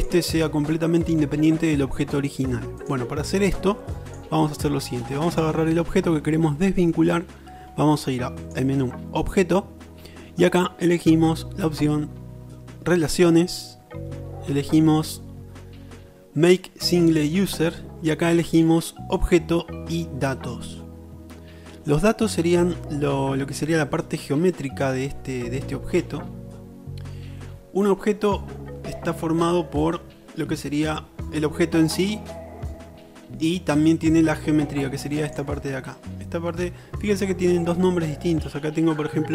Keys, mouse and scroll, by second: 0.1-1.8 drag, 5.3 click, 8.5 right click, 35.4-39.3 middle drag.